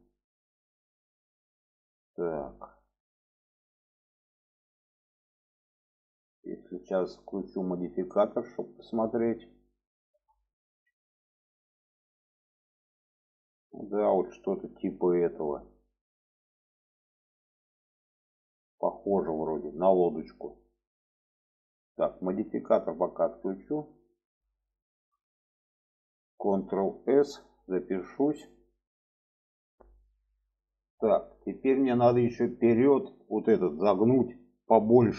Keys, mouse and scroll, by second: 1.1-4.2 middle drag, 5.0 shift+middle click, 5.9 shift+middle click, 7.0-8.5 drag, 10.1 Tab, 10.5-11.8 middle drag, 12.2-21.3 middle drag, 23.1 click, 23.7 middle click, 24.7 shift+middle click, 25.8 shift+middle click, 26.8 ctrl+s, 27.4-28.1 shift+middle drag.